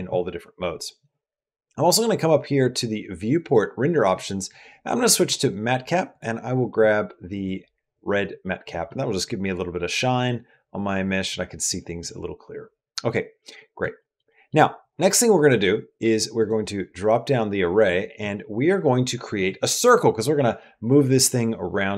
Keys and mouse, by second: 3.3-7.6 drag, 8.2 middle click, 8.7-11.8 middle drag, 12.8 middle click, 13.2 middle click, 13.8 shift+middle click, 14.1 middle click, 16.2 click.